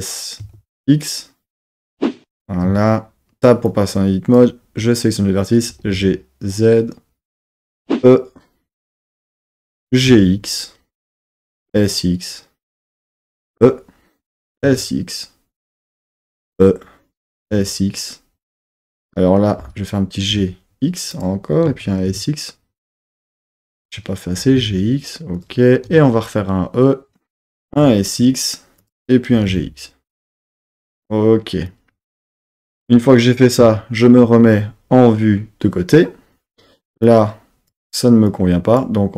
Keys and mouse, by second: 0.4 x, 2.2 click, 2.7 Tab, 3.7 click, 5.9 g, 5.9 z, 7.3 click, 7.8 e, 9.4 click, 9.8 g, 10.1 x, 11.3 click, 11.5 s, 11.6 x, 13.1 click, 13.4 e, 14.3 click, 14.5 s, 14.7 x, 16.2 click, 16.4 e, 17.2 click, 17.3 s, 17.5 x, 19.0 click, 19.6 g, 20.3 x, 21.1 click, 21.7 s, 22.1 x, 23.6 click, 24.4 g, 24.6 x, 25.4 click, 25.9 e, 27.3 click, 27.6 s, 27.7 x, 28.8 click, 29.3 g, 29.5 x, 30.5 click, 31.7 click, 33.6 KP_3, 37.1 click, 38.3 click.